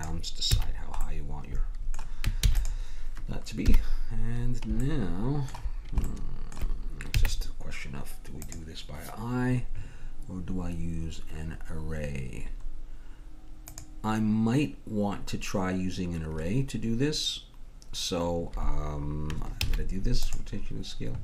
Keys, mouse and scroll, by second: 0.6 a, 1.0 middle click, 1.2 click, 2.4 ctrl+s, 2.9-4.9 drag, 2.9-4.9 right drag, 3.7-4.9 middle drag, 3.7 KP_1, 7.1 z, 13.7-18.9 drag, 19.6 ctrl+a.